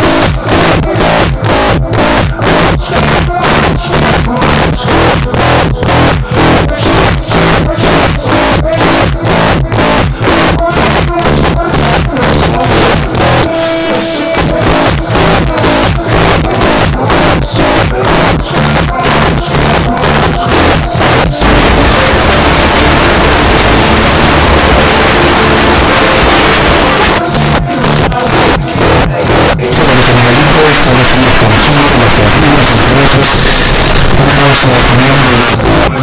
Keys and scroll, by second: 3.5 Down, 3.8 Down, 3.9 Down, 4.1 Down, 4.3 Down, 4.4 Down, 4.7 Down, 5.0 Down, 5.2 Down, 5.6 Up, 5.8 Return, 27.1 Page_Down, 35.4 Page_Down.